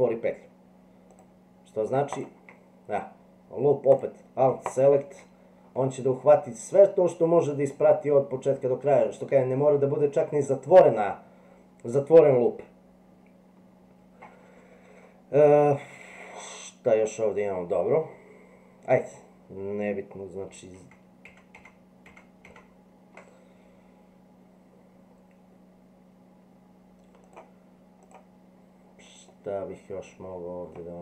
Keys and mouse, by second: 1.1 click, 4.7 alt+click, 5.7 middle click, 7.0 middle click, 9.0-10.1 middle drag, 20.7 ctrl+z, 21.2 ctrl+z, 21.5 ctrl+z, 28.0 click, 29.3-30.7 middle drag.